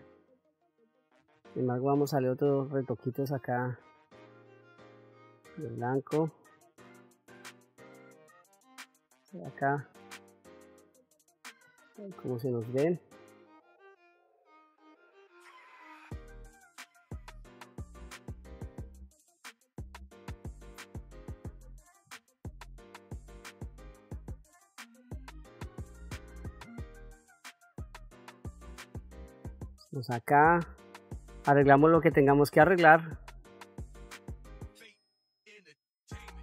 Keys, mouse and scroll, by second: 0.9 f, 3.7 click, 4.7-8.3 drag, 9.4-11.5 drag, 11.5-15.2 middle drag, 15.9 ctrl+middle click, 16.9 shift+middle click, 17.7 middle click, 20.5 click, 21.6 f, 23.3-26.0 drag, 26.2 middle click, 28.3 click, 29.0 middle click, 30.4 click, 31.8 f, 32.8 middle click, 33.4 ctrl+middle click, 34.5 shift+middle click, 34.9 middle click, 35.4 f, 35.8 click.